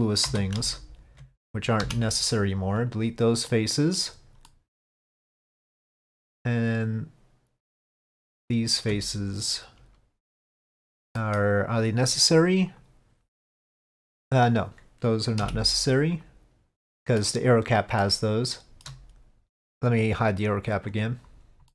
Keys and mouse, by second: 0.8 alt+click, 1.9 Delete, 3.6 middle click, 4.6 middle click, 5.8-7.8 middle drag, 8.4 alt+click, 11.3 middle click, 12.8 click, 13.4 middle click, 15.5 Delete, 16.9 middle click, 18.1-21.0 middle drag, 18.7 shift+Tab, 21.0 click.